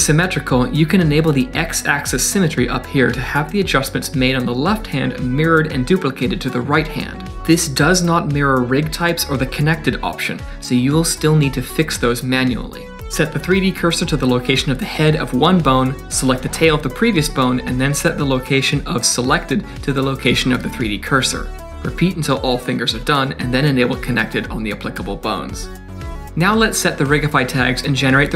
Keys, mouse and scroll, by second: 0.0 shift+middle click, 0.8 click, 0.9 click, 1.5 click, 2.0 d, 2.3 right click, 2.3 d, 2.6 click, 5.1 click, 5.1 g, 12.0 middle click, 12.2 scroll up 2, 12.4 shift+middle click, 12.8 KP_Decimal, 13.0-13.7 scroll down 4, 13.5 middle click, 13.7 middle click, 13.9 click, 14.0 click, 14.1 click, 14.4-21.9 typing, 14.7 click, 15.1 click, 15.1 click, 15.6 click, 15.9 shift+middle click, 16.1 click, 16.2 click, 16.5 click, 17.2 ctrl+z, 17.3 click, 17.4 click, 17.9 click, 18.4 click, 18.6 click, 19.1 click, 19.4 click, 19.9 shift+middle click, 20.2 click, 20.2 click, 20.7 click, 21.1 click, 21.2 click, 21.4 click, 21.7 click, 22.1 scroll down 2, 22.2 middle click, 22.5 shift+middle click, 22.6 middle click, 22.7 scroll up 2, 22.9 click, 23.3 click, 23.8 click, 24.0 click, 24.4 click, 25.2 click, 25.4 click, 26.6 Down, 26.8 Down, 26.8 click, 27.2 click, 27.9 click, 28.1 click.